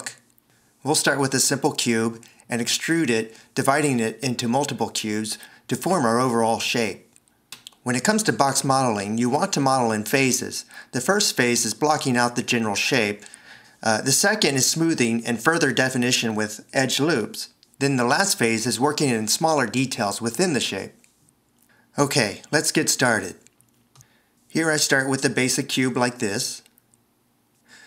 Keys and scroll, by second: 25.6 alt+1.